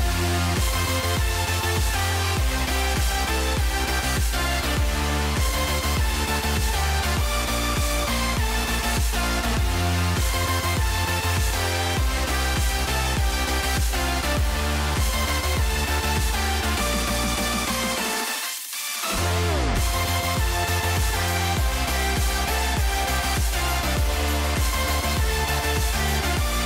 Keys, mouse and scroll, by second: 0.5 Tab, 2.5 g, 5.1-6.6 drag, 7.1 middle click, 7.7 middle click, 8.1 middle click, 8.6-10.1 drag, 12.8-14.5 drag, 19.3 Tab, 19.8 click, 20.0 click, 21.5 shift+middle click, 22.9 r.